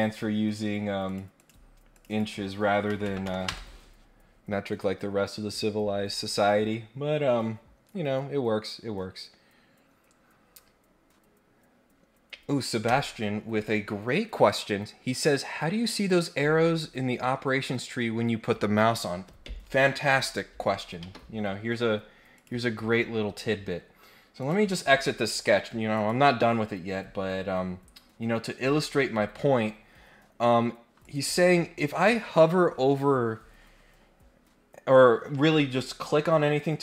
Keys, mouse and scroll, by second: 1.0 click, 1.3 click, 1.9 click, 2.1 click, 7.6-9.5 scroll up 1, 21.0 Escape, 22.3 click, 24.4 click, 25.9 click, 26.4 scroll up 1, 26.8-27.7 scroll down 3, 27.9 scroll up 1, 28.6 scroll up 1, 31.0 click.